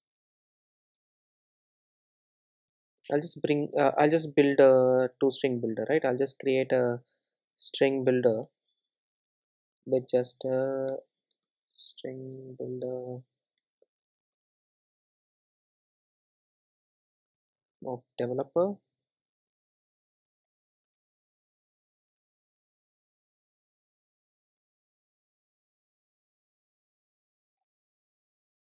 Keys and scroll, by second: 4.0 super+z, 8.5 Return, 14.4 Return.